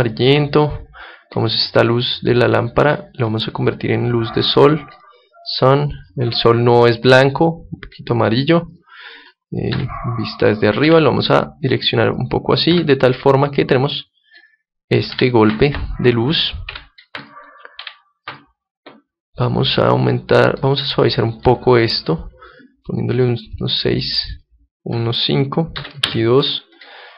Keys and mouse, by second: 0.6 middle click, 1.5-3.3 right drag, 2.1-9.6 drag, 9.6 KP_7, 10.7 r, 12.1 click, 15.0 Escape, 16.6 g, 17.2-22.3 drag, 17.7 r, 23.0-26.0 drag, 26.7 click.